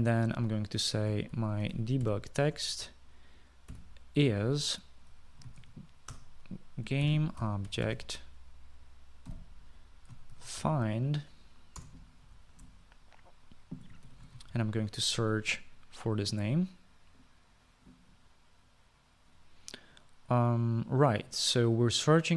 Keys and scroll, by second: 2.0-13.8 typing, 12.9 Return, 15.2 typing, 15.6 ctrl+v.